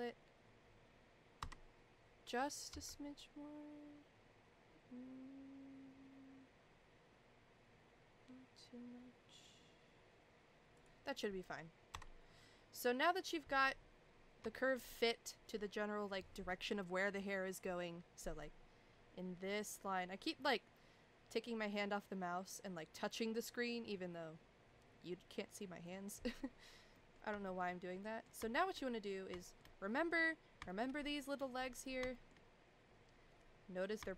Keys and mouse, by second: 1.4 Tab, 2.7 s, 11.9 Tab, 14.5 shift+middle click, 14.9 middle click, 25.9 middle click, 26.9 middle click, 27.4 shift+middle click, 28.0 middle click, 28.5 shift+middle click, 29.4 shift+middle click, 30.7 shift+middle click, 31.1 middle click, 32.1 shift+middle click.